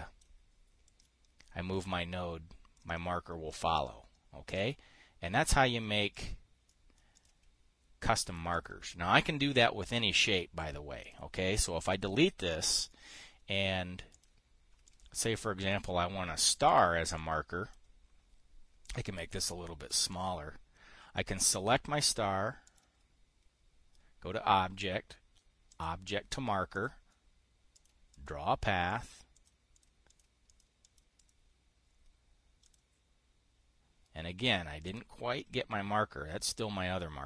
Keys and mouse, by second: 0.8 middle click, 1.4-2.4 drag, 2.4 middle click, 3.3-5.2 drag, 6.0 click, 7.2 click, 7.7 click, 8.8 click, 9.0 click, 11.5 click, 12.4 Delete, 12.6-13.8 drag, 14.6 click, 15.4 ctrl+click, 16.9 click, 17.2 click, 17.7 click, 19.4-20.5 ctrl+drag, 23.2 click, 26.2 click, 27.2 click, 28.3 click, 28.6 click, 29.4 click, 29.8 click, 30.2 click, 30.6 click, 31.0 click, 31.4 click, 31.7-33.2 right drag, 33.2 click, 35.5 click.